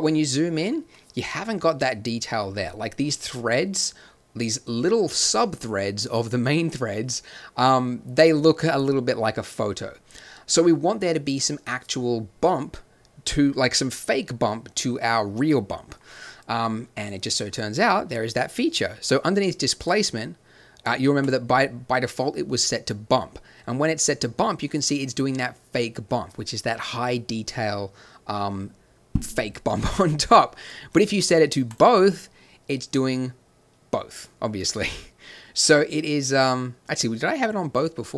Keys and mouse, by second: 2.2-2.7 middle drag, 5.4 middle click, 11.1-12.1 middle drag, 16.9-21.3 drag, 23.4-24.1 drag, 24.3-24.8 middle drag, 25.0 middle drag, 25.4-26.5 middle drag, 26.8-28.4 middle drag, 30.6-32.8 drag.